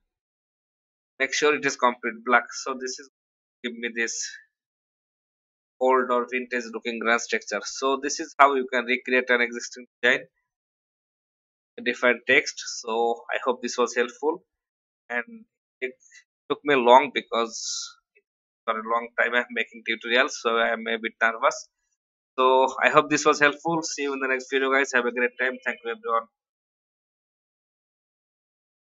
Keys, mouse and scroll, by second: 8.3 click, 15.6 alt+scroll down 1, 18.6 click, 20.0 ctrl+z, 22.2 Left, 22.4 Left, 22.5 Left.